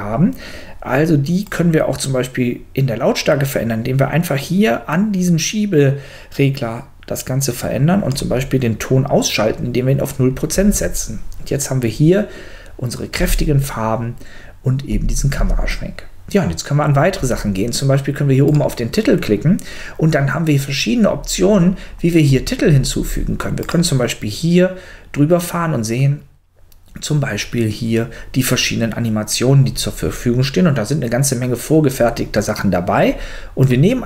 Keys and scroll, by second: 10.5 space, 13.2 space, 14.9 space.